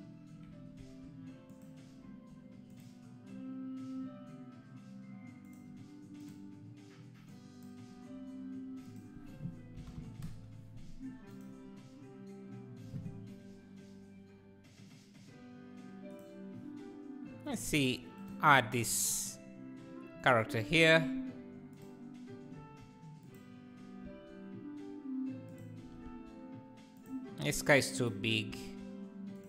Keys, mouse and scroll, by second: 0.8 s, 2.1 g, 6.2 click, 10.5-16.3 drag, 18.2-19.0 shift+right drag, 19.0-20.8 drag, 20.8 s, 22.6 g, 25.8 s, 25.8 r, 27.5 scroll down 1, 28.0 drag, 28.6 s.